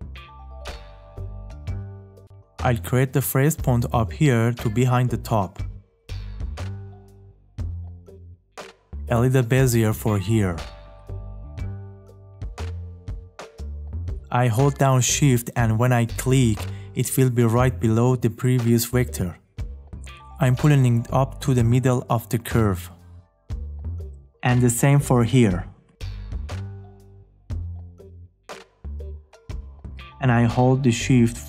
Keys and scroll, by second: 1.2 `.